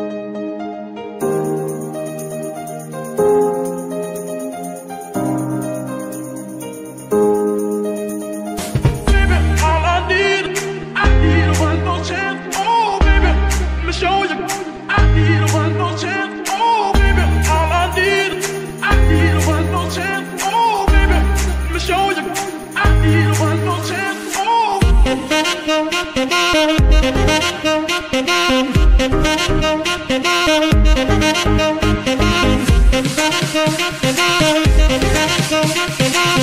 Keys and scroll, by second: 2.5 g, 2.9 Escape, 3.5 g, 3.8 Escape, 12.5 ctrl+c, 13.5 ctrl+c, 14.0 v, 16.2 shift+n, 19.4 KP_Divide, 33.8 KP_Divide.